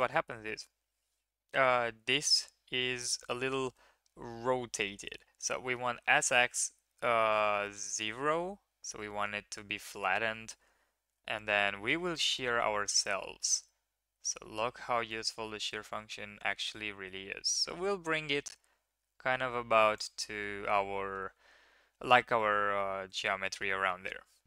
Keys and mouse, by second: 6.0 s, 11.1 F3, 24.0 Tab, 24.0 click, 24.1 middle drag.